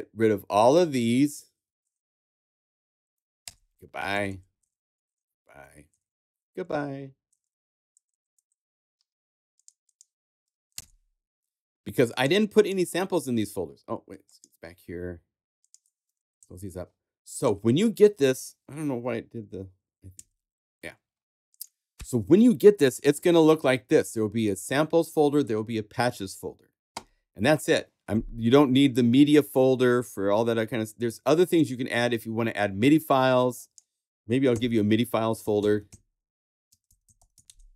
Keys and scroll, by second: 0.8 shift+Up, 1.6 shift+super+=, 2.1 super+=, 3.4 super+BackSpace, 4.1 super+Up, 4.6 super+Up, 4.8 super+BackSpace, 5.6 super+Up, 6.1 super+BackSpace, 6.6 super+Up, 8.9 super+Up, 10.7 super+BackSpace, 15.8 super+a, 16.4 super+Left, 16.9 Left, 20.1 super+Up, 34.5 shift+super+n, 35.3-37.6 typing.